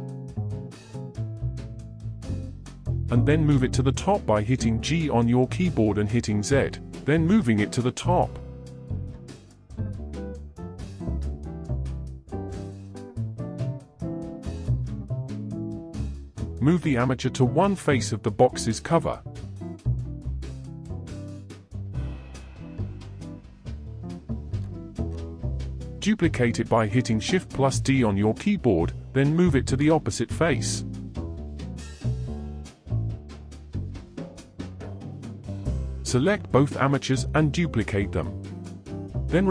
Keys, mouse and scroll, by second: 0.3-0.9 scroll up 2, 2.5 g, 13.2-16.2 middle drag, 18.5 click, 20.7 g, 25.1 shift+d, 29.8 shift+click, 30.6-34.9 middle drag, 34.9 shift+d, 37.0 r.